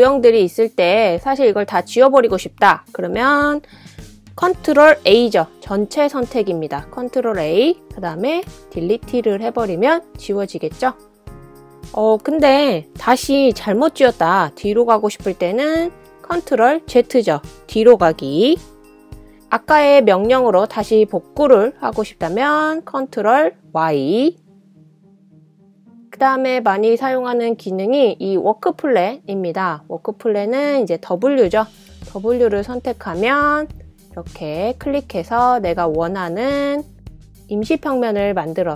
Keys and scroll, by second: 6.8 super+a, 10.0 BackSpace, 17.7 super+z, 24.7 ctrl+super+y, 33.1 w, 33.6 w.